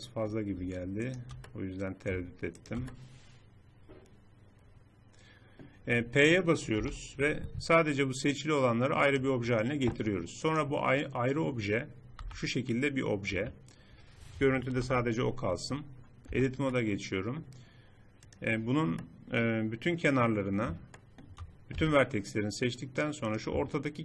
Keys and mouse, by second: 1.0 middle click, 2.9 click, 4.1 middle click, 6.8 p, 9.8 Tab, 12.2 g, 12.4 click, 14.8 shift+h, 16.3 Tab, 16.8 middle click, 19.2 click, 19.8 click, 21.8 a.